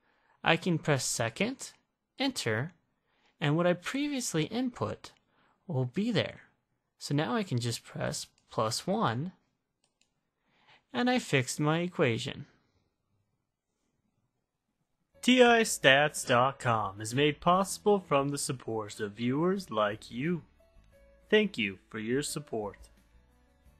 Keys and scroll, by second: 2.3 Return, 9.3 1, 10.0 Return.